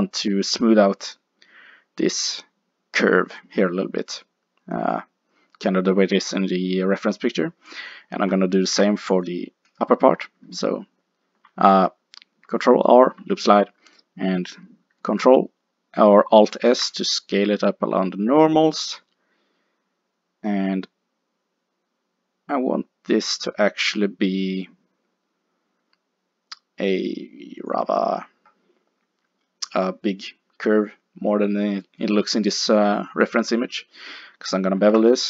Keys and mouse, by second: 8.7 ctrl+r, 16.7 alt+s, 27.8-29.5 drag, 29.5 middle click, 34.8 ctrl+b.